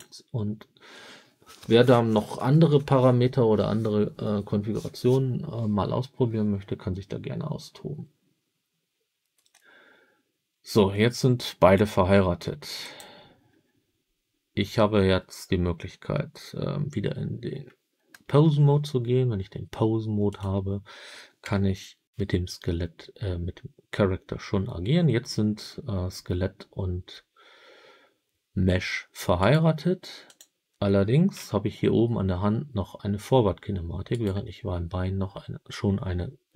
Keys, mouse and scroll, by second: 12.7 click, 18.2 ctrl+Tab, 20.2 click, 21.3 g, 29.3 right click, 30.2 click, 31.3 g, 34.0 right click.